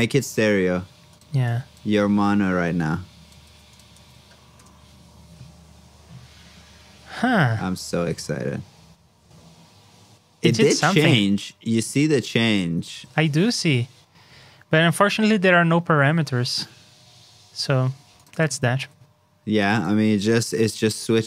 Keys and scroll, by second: 3.4 super+c, 3.9 super+v, 14.3 super+Tab, 18.6 super+c, 18.7 super+Tab, 19.9 super+v.